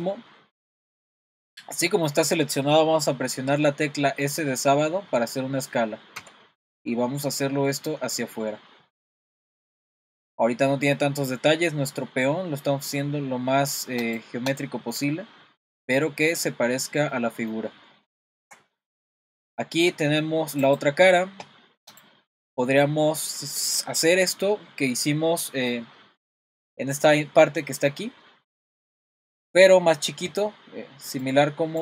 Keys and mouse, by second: 0.8 middle click, 6.2 s, 14.5 click, 14.9 middle click, 16.1 middle click, 17.1 middle click, 18.2 shift+middle click, 20.7 click, 22.0 click.